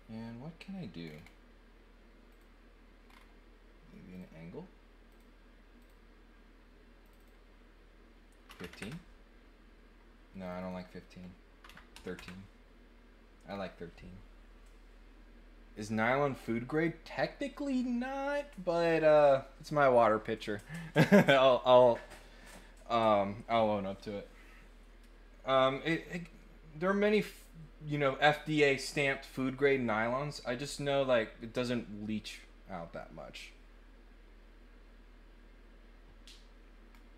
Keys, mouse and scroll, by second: 1.0 scroll down 2, 2.3 click, 3.0 scroll up 2, 4.1 click, 5.0 click, 5.7 click, 7.0 click, 7.2 click, 10.6 click, 13.4 scroll down 1, 16.7 click, 36.9 scroll down 1, 36.9 middle click.